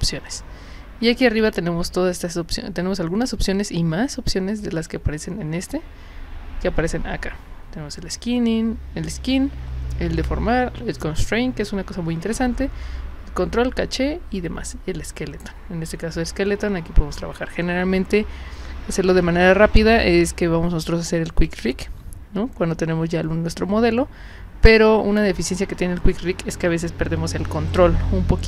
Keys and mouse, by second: 1.4 click.